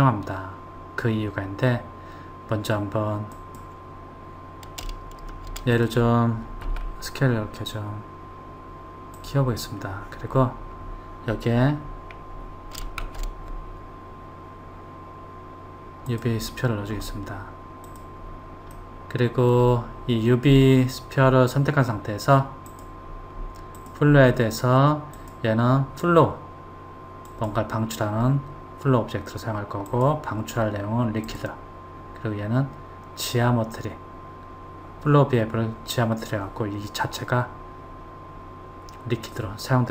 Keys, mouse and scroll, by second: 3.3 click, 5.7 click, 6.7 s, 13.1 shift+a, 17.9 click, 18.7-21.7 middle drag, 22.7 click, 23.8 click, 25.2-28.2 drag, 29.9-32.9 drag, 39.3 click.